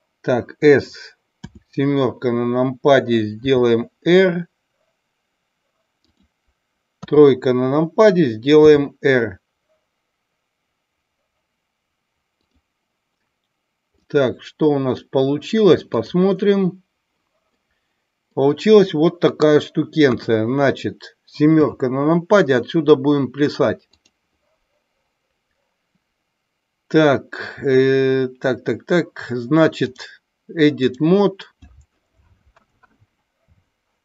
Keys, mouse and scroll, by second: 1.3 KP_7, 3.4 r, 6.0 click, 7.0 KP_3, 8.5 r, 12.3 click, 14.0-14.8 middle drag, 16.5-17.0 drag, 17.4 middle drag, 17.7-18.3 middle drag, 19.9 KP_1, 21.4 KP_7, 23.8 click, 29.8-31.0 drag.